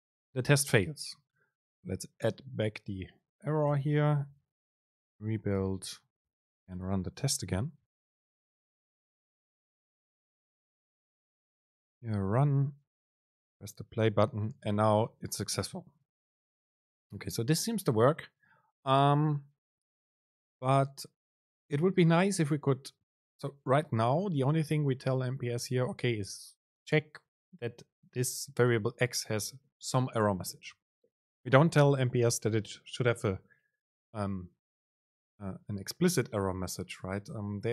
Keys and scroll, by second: 3.9 BackSpace, 5.8 ctrl+shift+super+F9, 13.3 super+r.